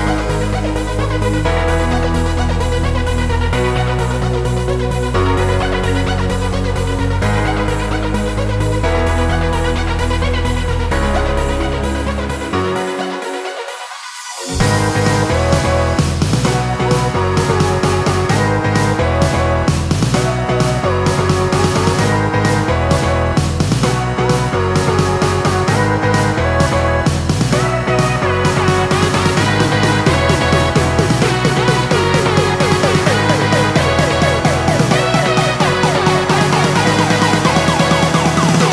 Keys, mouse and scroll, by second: 2.0 click, 4.7 click, 4.8 ctrl+a, 5.3 ctrl+c, 5.8 click, 6.4 ctrl+v, 6.9 click, 12.9 click, 15.6 ctrl+a, 16.1 ctrl+c, 16.5 click, 17.2 ctrl+v, 18.1 click, 18.8 ctrl+t, 19.5 click, 20.6 Return, 21.3 click, 25.4 click, 29.1 click, 36.6 click.